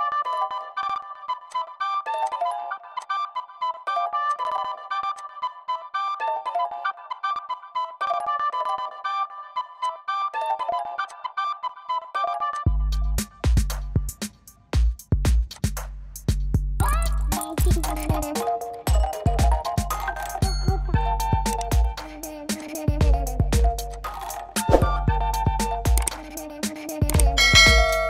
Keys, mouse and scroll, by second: 1.6 click, 2.3 click, 3.2 click, 4.3 click, 9.2 click, 9.8 click, 11.1 click, 12.5 click, 15.7 click, 16.9 click, 19.5 click, 22.6 click, 26.8 click.